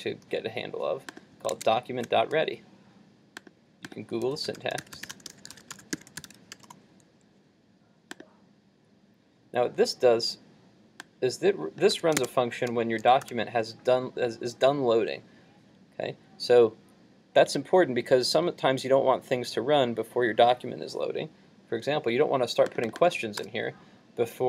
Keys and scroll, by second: 1.6 super+Tab, 11.9 super+c, 12.3 super+Tab, 13.3 super+v.